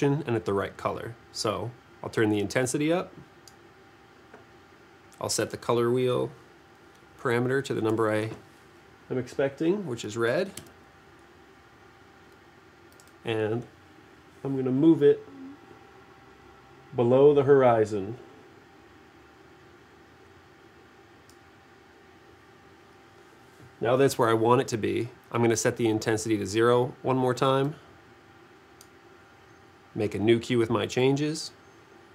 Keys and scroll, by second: 7.8 2, 10.6 Return.